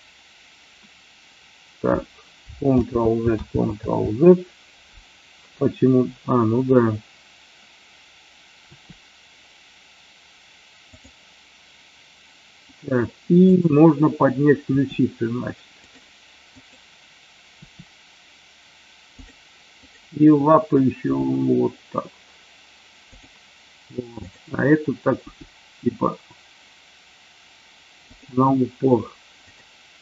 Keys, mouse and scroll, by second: 2.6 ctrl+z, 3.5 ctrl+z, 8.6 r, 13.4 click, 14.6 r, 15.8 click, 21.0 g, 24.1 click, 25.1 g, 28.1 click.